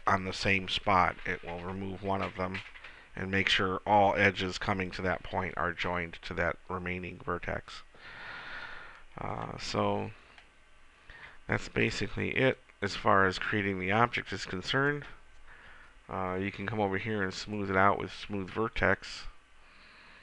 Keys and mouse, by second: 10.5-12.5 middle drag, 12.5 KP_1, 17.5 click.